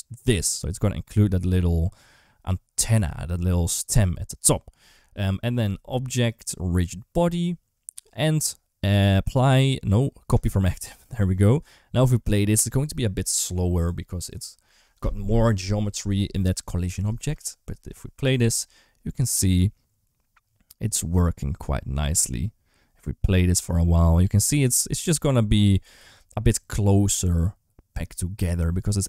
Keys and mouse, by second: 3.7 ctrl+d, 3.8 ctrl+z, 6.1-10.3 drag, 12.4 ctrl+s, 17.0 space.